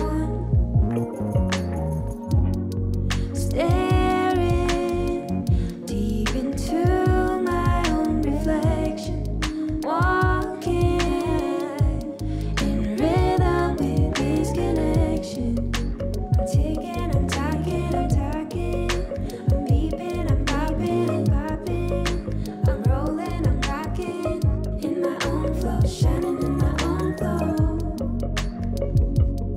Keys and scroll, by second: 18.9 ctrl+g, 24.5 ctrl+-, 25.9 ctrl+=, 26.4 space, 27.5 ctrl+=.